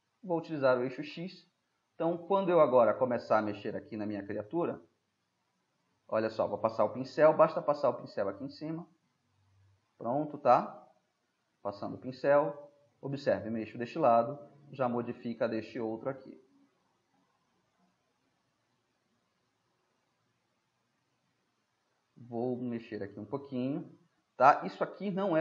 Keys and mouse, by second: 1.1 click, 2.0-4.1 middle drag, 8.2-12.5 drag, 15.0-16.8 drag, 18.6-20.0 drag, 20.0-24.0 middle drag, 24.0-25.4 drag.